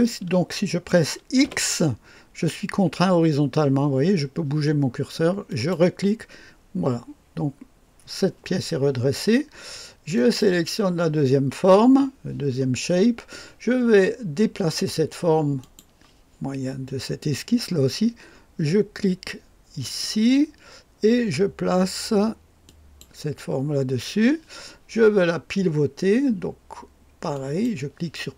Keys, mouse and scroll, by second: 1.5 x, 5.5 click, 10.1 click, 15.6 click, 19.8 click, 22.7 click, 23.3 click, 27.3 click.